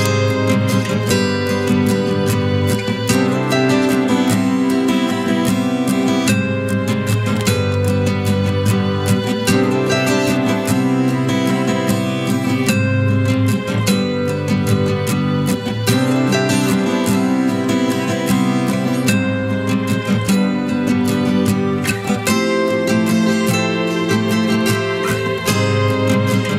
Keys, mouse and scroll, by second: 1.8-2.4 alt+scroll up 1.